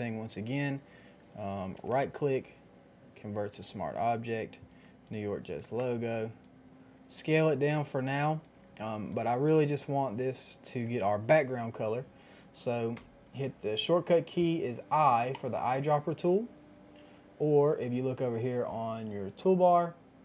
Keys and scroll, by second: 5.6 ctrl+t, 7.6 Return, 12.9 |, 16.9 |.